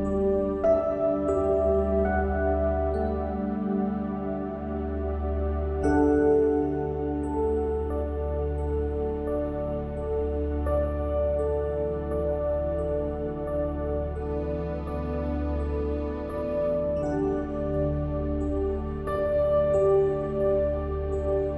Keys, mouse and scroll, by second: 0.4-2.9 drag, 3.8 Tab, 4.4 click, 5.9 ctrl+r, 9.8 ctrl+r, 13.2-19.9 middle drag.